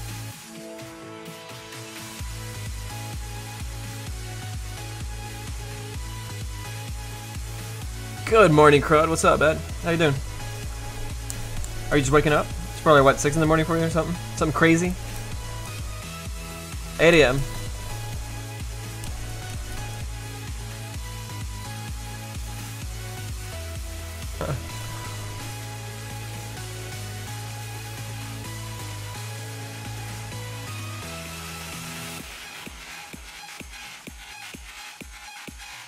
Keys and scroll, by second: 10.8 a.